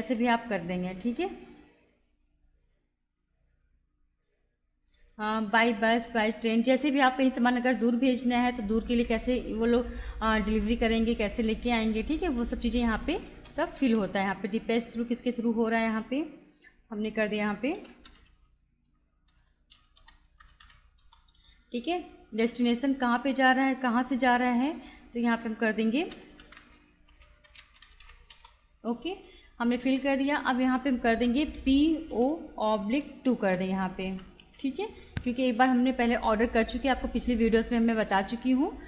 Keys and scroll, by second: 0.2 space, 4.9-6.5 typing, 13.3 Return, 17.3-21.1 typing, 25.8-28.5 typing, 31.6 shift+p, 32.1 shift+o, 33.5 /, 34.1 0, 34.5 2.